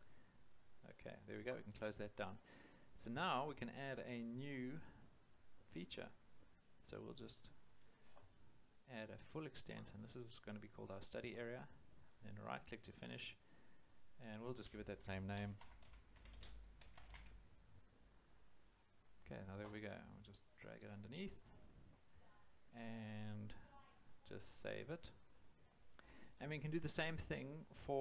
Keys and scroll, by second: 15.1-17.5 typing.